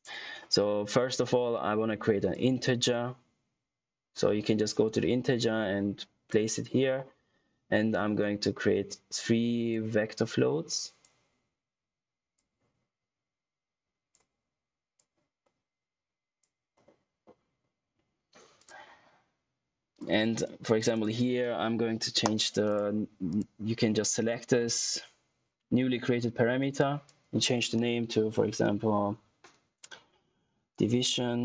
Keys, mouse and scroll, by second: 1.1-2.2 scroll up 1, 2.2 click, 8.1-9.5 scroll up 1, 9.6 click, 12.6 click, 15.2 click, 19.7 click, 20.7 click, 30.4-31.4 typing.